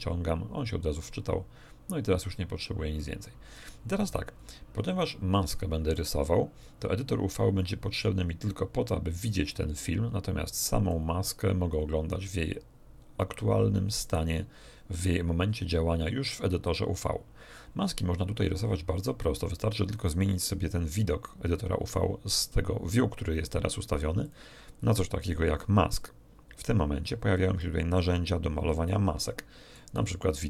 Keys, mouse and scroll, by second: 0.8-1.5 scroll down 2, 1.1 middle click, 3.0 click, 4.3-5.0 scroll up 2, 5.3 middle click, 10.8 click, 12.1 scroll down 1, 12.7 scroll down 1, 13.4 scroll up 1, 24.2 click, 26.0 click, 27.6-29.9 middle drag.